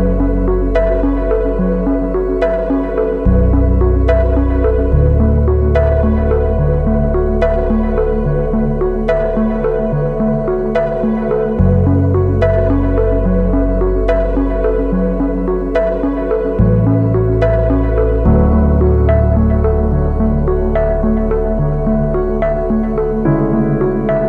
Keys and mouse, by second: 0.3 shift+middle click, 1.1 KP_1, 2.1 shift+click, 7.1 alt+right click, 8.0 2, 8.2 right click, 8.5 alt+right click, 9.1 shift+middle click, 9.7 alt+shift+right click, 10.6 alt+shift+right click, 11.2 alt+shift+right click, 11.7 alt+shift+right click, 12.6 shift+middle click, 12.9 x, 16.1 ctrl+z, 16.5 a, 17.0 middle click, 18.0 shift+middle click, 19.6 shift+middle click, 21.6 alt+click, 22.3 click, 24.1 click.